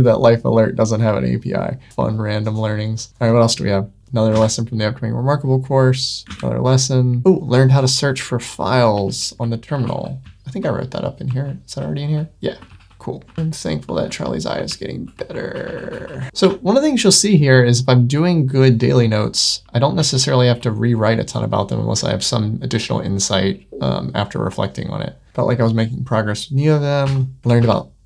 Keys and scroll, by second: 3.1 super+w, 5.2 super+w, 6.2 super+w, 7.2 ↺, 8.9 super+1, 12.6 super+9, 13.1 super+w, 13.6 super+1, 17.3 Tab, 20.0 super+9.